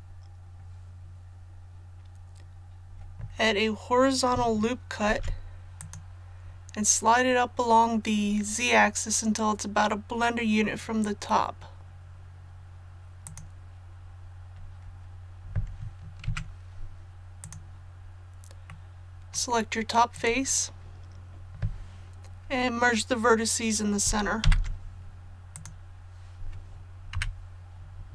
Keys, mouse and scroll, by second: 5.8 click, 16.2 Tab, 17.4 click, 18.7 middle click, 20.1 right click, 24.4 alt+m, 25.5 click, 27.1 KP_1.